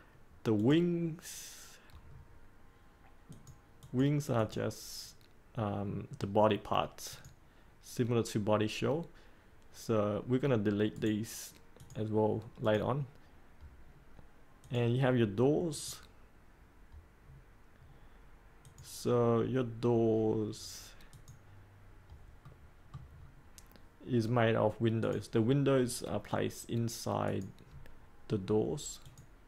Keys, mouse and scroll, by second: 2.0-3.3 scroll up 1, 3.3 click, 10.9 right click, 11.7-13.6 drag, 13.7-14.6 scroll up 1, 14.6-15.6 drag, 17.1-17.9 scroll up 1, 18.6-19.7 drag, 22.3 middle click, 23.1-24.9 scroll up 1, 24.9 click.